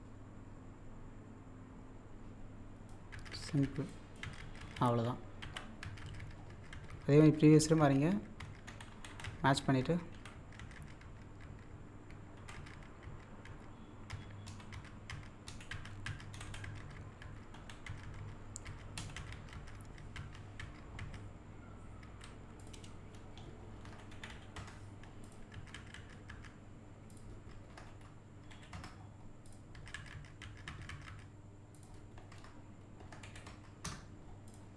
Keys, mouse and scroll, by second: 3.0 scroll down 1, 3.8 click, 5.4 z, 8.7 Left, 10.1 Up, 12.4 Up, 14.5 Down, 15.5 Down, 16.3 Right, 19.0 Down, 22.6 click, 25.3 click, 27.1 click, 29.5 click, 31.8 click, 34.5 click.